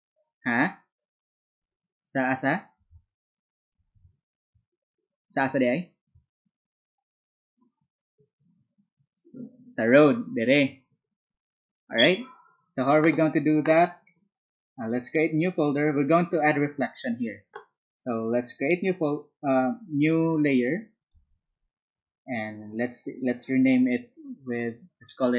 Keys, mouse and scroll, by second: 14.8 ctrl+click, 15.4 ctrl+click, 21.0 ctrl+click, 23.1 ctrl+click, 24.4 ctrl+click, 24.5 ctrl+click.